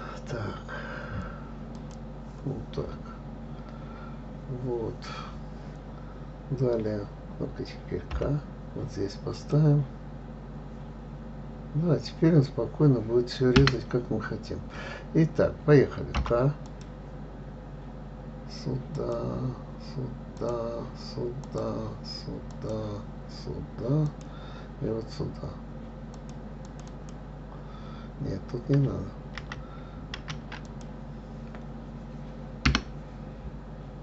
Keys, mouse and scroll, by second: 2.1 click, 3.5-4.6 scroll up 2, 4.6 scroll down 2, 8.5 k, 16.5 k.